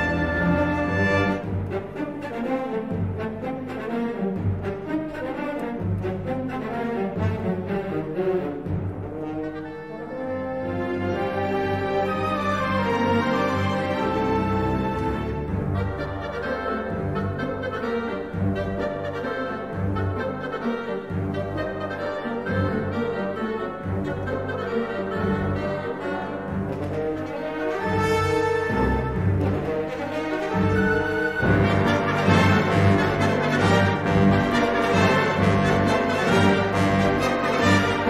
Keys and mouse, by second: 0.4 2, 1.0 g, 3.4 middle click, 4.0 3, 4.3 click, 5.0 e, 7.8 2, 8.1 click, 8.8 2, 9.2 middle click, 10.3 g, 14.2 3, 14.9 s, 16.2 g, 17.3 shift+middle click, 17.8 s, 22.1 middle click, 23.0 2, 23.2 click, 23.5 g, 31.3 2, 32.2 g, 35.6 2, 36.0 3, 36.6 g.